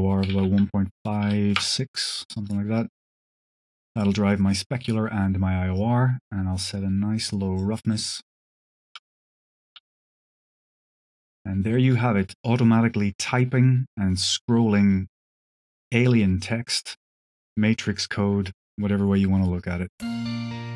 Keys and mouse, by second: 2.2 alt+click, 2.7-3.2 alt+drag, 5.6-7.5 drag, 7.8-8.5 drag, 8.7 shift+click, 9.1 click, 9.6 space, 10.6 click, 11.6 shift+click, 19.7 space.